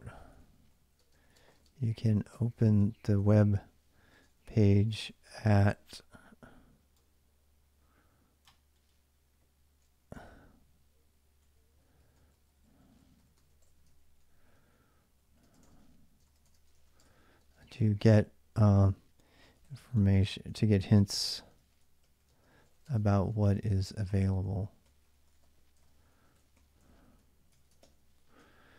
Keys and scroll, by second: 0.0-5.5 typing, 9.9 ctrl+[, 10.1-27.3 typing, 27.3 ctrl+[, 27.6 ctrl+l.